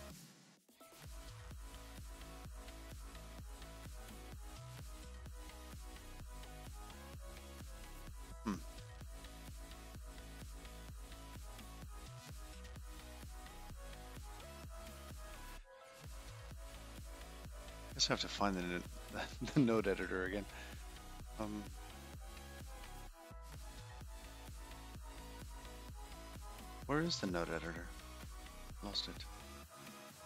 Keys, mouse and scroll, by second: 2.3-2.8 scroll up 4, 4.4-5.3 scroll up 3, 5.3 click, 5.3 scroll up 1, 6.1-6.5 scroll down 3, 8.0 click, 9.3-10.4 scroll up 16, 17.6-19.7 scroll down 21, 19.7 click, 19.7 scroll down 4, 29.9 click.